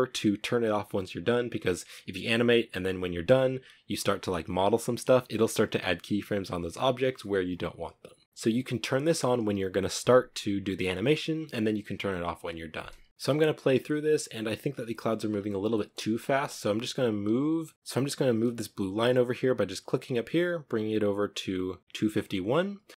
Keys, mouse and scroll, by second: 12.6 space, 13.2-14.4 drag, 14.4-15.0 scroll up 3, 15.0 middle click, 15.4 scroll up 1, 15.5 space, 15.9-22.3 drag, 22.3-22.9 scroll up 3, 22.9 g.